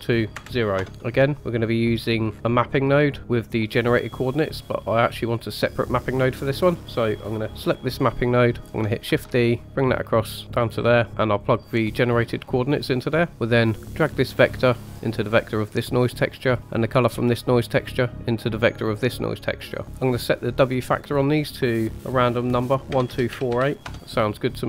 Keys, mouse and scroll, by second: 1.9-2.3 scroll down 4, 2.3 middle click, 3.2 click, 4.9 click, 6.3 click, 9.0 shift+d, 11.3-12.5 drag, 13.0-13.5 scroll up 3, 13.3 middle click, 14.0 click, 15.1-16.0 drag, 16.7-18.8 drag, 19.8 middle click, 19.8-20.2 scroll up 2, 20.8-23.8 drag.